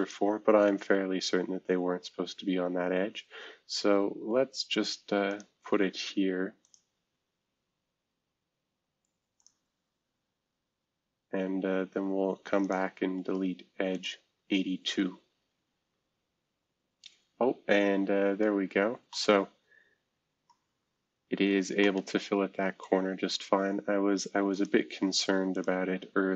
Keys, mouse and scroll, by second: 0.0 click, 3.9-5.3 scroll up 2, 5.3 click, 6.6 click, 9.4 click, 12.6 click, 17.8-18.6 scroll down 2, 18.6-19.1 scroll up 2, 19.1-20.2 middle drag, 20.6 scroll down 2, 21.1-22.8 scroll up 3, 21.8-24.3 middle drag, 24.5 click, 25.1 click.